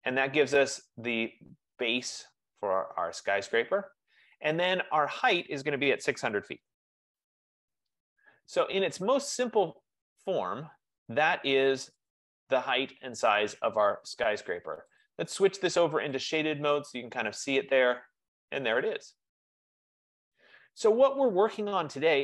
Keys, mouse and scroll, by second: 5.4-7.6 middle drag, 6.1-8.6 typing, 9.3 click, 10.1-10.5 scroll, 12.2 click, 15.1 click, 16.3 click, 17.5 click, 18.3-19.7 scroll, 19.7-20.1 scroll.